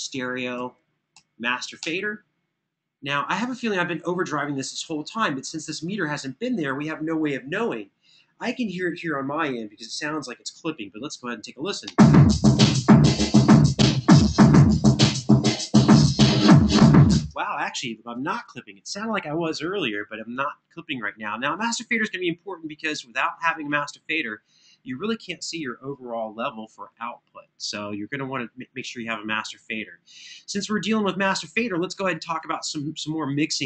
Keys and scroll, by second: 0.1 super+Down, 0.9 super+Up, 1.5 Return, 11.6 space, 16.9 space.